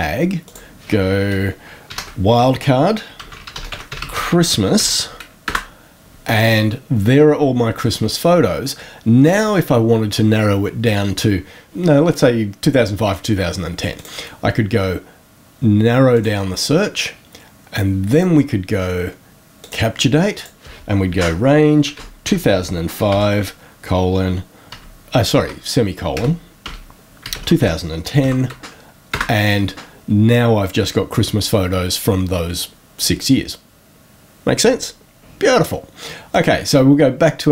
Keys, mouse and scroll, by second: 0.4 click, 1.8 shift+5, 2.9-5.2 typing, 5.4 Return, 13.9 click, 16.1 click, 18.1 click, 19.5 click, 20.3 click, 21.1-23.1 typing, 24.6-28.0 typing, 29.0 Return, 36.2 click.